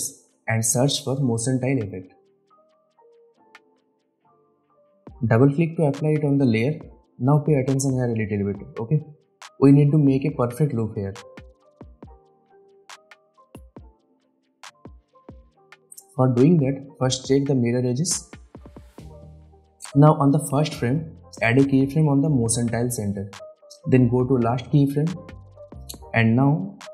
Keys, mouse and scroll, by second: 0.4-2.1 typing, 3.5-8.6 drag, 12.2-13.5 drag, 13.3 ctrl+click, 13.6 ctrl+z, 15.0 click, 18.6 click, 22.9-24.1 drag, 25.6-26.3 alt+scroll up 1, 26.3-26.7 alt+scroll down 1, 26.7-26.9 alt+scroll up 1.